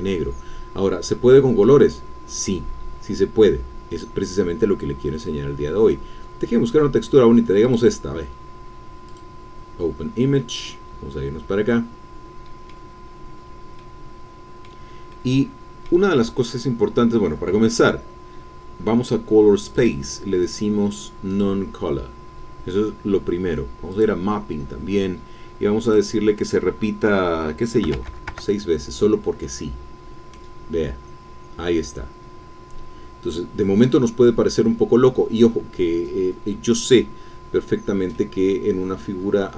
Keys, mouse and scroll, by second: 0.2-1.8 scroll down 3, 1.8-4.5 scroll down 1, 5.4-6.5 scroll down 2, 6.5 scroll down 1, 7.6 click, 9.1 click, 10.4-13.0 drag, 13.0 middle click, 13.1-13.8 scroll up 1, 13.8-15.8 middle drag, 15.8 click, 15.9 scroll up 1, 16.1-17.8 middle drag, 17.8-18.3 scroll down 1, 19.7 click, 21.3 click, 23.9 click, 24.4-25.1 scroll down 2, 25.9 click, 27.8 6, 28.0 Tab, 28.1 KP_6, 28.3 KP_Enter, 29.4-30.5 middle drag, 31.1-31.7 scroll down 1, 31.7-37.1 middle drag, 37.8-38.1 scroll down 1, 38.1-39.5 middle drag.